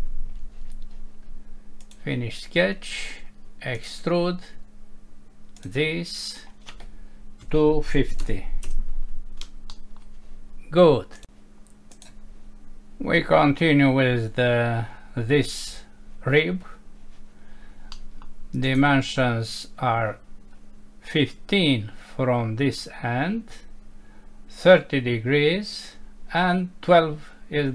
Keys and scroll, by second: 8.6 Return, 9.7 F6, 17.9 F6.